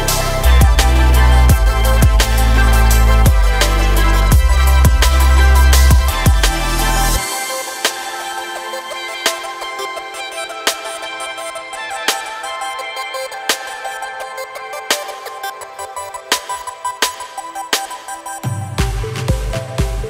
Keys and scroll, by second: 5.8 shift+e, 11.9 Tab, 17.6 Tab.